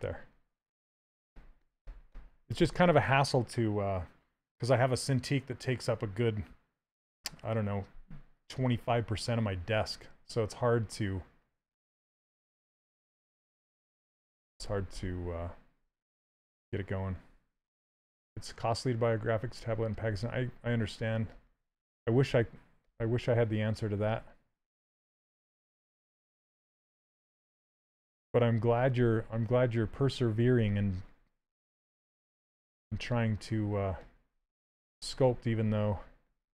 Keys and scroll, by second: 0.4 s, 19.8 s, 30.3 s.